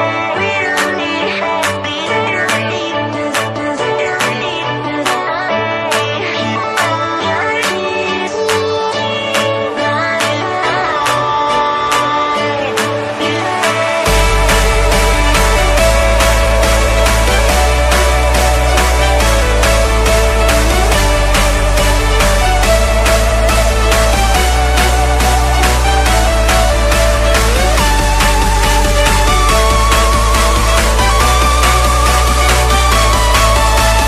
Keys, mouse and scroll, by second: 1.0 click, 6.1-6.6 typing, 8.4 BackSpace, 12.2 click, 14.9 click, 17.4-18.9 scroll down 1, 19.4 click, 20.4 alt+scroll down 1, 21.0 click, 23.8 Return, 24.8-25.1 alt+scroll up 2, 30.2 alt+Num_Lock, 30.2-30.7 alt+scroll down 2, 31.0-32.0 alt+scroll up 5, 32.4 click, 33.2 Tab, 33.9 Tab.